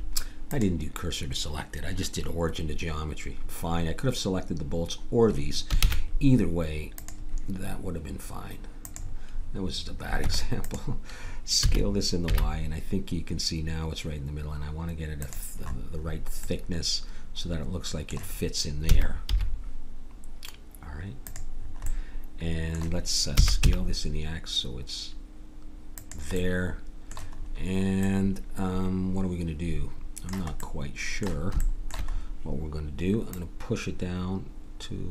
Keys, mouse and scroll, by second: 0.6 shift+s, 5.8 shift+a, 10.2 Tab, 11.6 s, 18.9 s, 23.3 s, 33.3-34.5 drag.